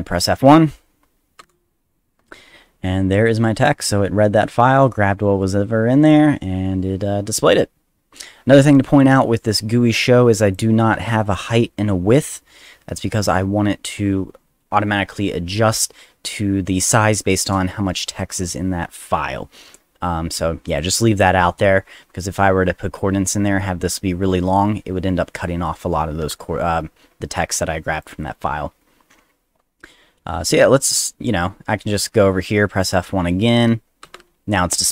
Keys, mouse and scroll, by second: 1.4 F1, 10.4 click, 11.2 click, 20.7 click, 28.0 click, 34.0 F1.